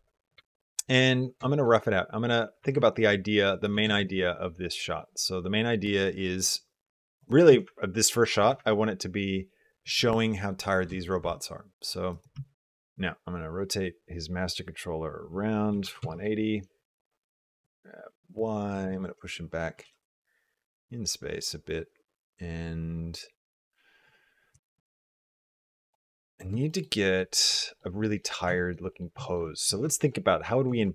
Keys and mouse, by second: 0.3 shift+middle click, 0.5 middle click, 1.3 shift+middle click, 2.4 r, 3.6 g, 7.3 r, 8.2 g, 10.7 g, 12.2 Tab, 12.8 r, 16.8 middle click, 17.3 g, 18.8 shift+middle click, 19.6 g, 24.3 g, 26.5 shift+middle click, 26.8 middle drag, 27.5 shift+middle drag, 28.0 middle click, 28.4 shift+middle click, 28.7 middle click, 29.1 shift+middle click, 29.7 shift+middle drag, 30.6 shift+middle click.